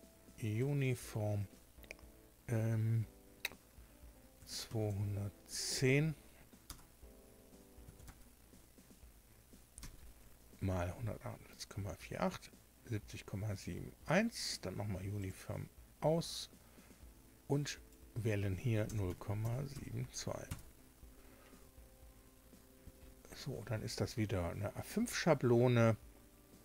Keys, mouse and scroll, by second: 0.5 click, 4.3 KP_2, 4.8 KP_0, 6.6 BackSpace, 7.7 KP_1, 8.0 KP_0, 10.0 Tab, 15.1 click, 17.6 click, 18.8 KP_0, 19.0 KP_Decimal, 19.3 KP_7, 19.7 KP_2, 20.4 KP_Enter.